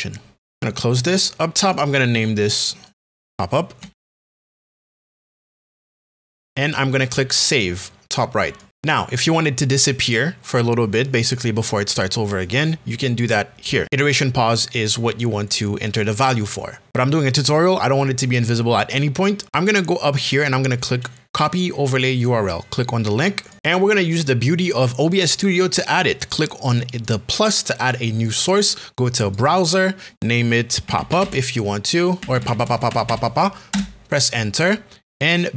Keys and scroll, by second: 3.5-5.2 typing, 30.6-33.7 typing.